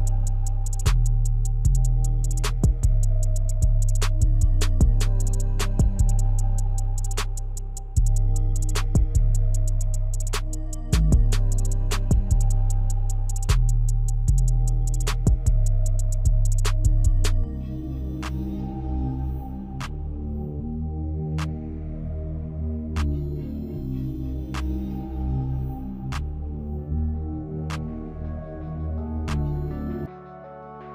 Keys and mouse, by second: 4.0 drag, 4.3 click, 5.0 click, 5.2 click, 6.3 click, 6.6 click, 8.4 click, 10.8 click, 11.7 click, 15.3 click, 16.0 click, 26.1 click, 26.6 click, 29.1 click.